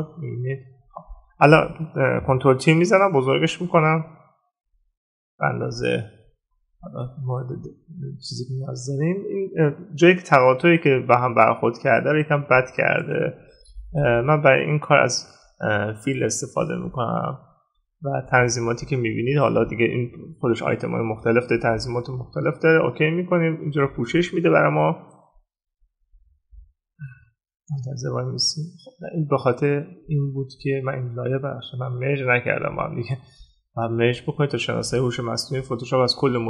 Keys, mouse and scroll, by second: 32.7 right click.